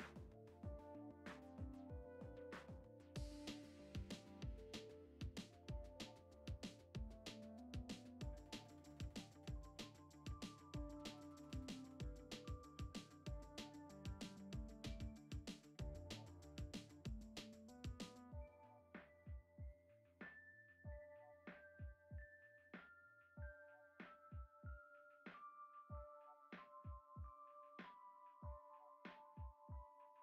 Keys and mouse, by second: 0.0 g, 0.7 g, 2.2-2.5 shift+middle drag, 3.1 s, 3.7 Tab, 4.2 f, 4.4 e, 5.5 i, 7.4 e, 9.5 ctrl+z, 10.2 ctrl+z, 10.8 i, 13.6 e, 16.1 ctrl+Tab, 16.8 s, 17.7 s, 18.6 right click, 20.8 click, 22.2 click, 22.4 click, 22.6 click, 22.9 click, 24.0-26.0 right drag, 26.5 shift+a, 29.6 s.